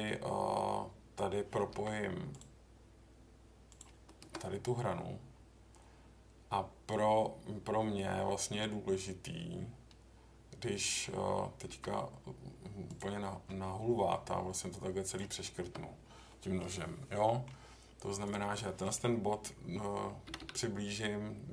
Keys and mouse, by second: 1.7 k, 11.7 k, 16.3 middle click, 17.1 middle click, 20.2 g, 20.4 g.